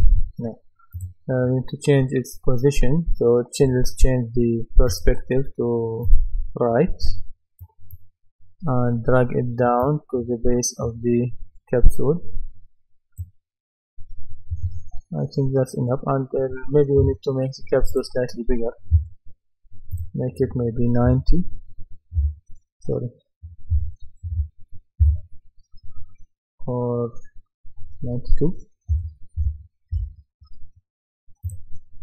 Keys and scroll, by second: 21.1 KP_9, 22.2 Return, 23.7 KP_9, 25.0 Return, 28.9 KP_9, 29.9 Return.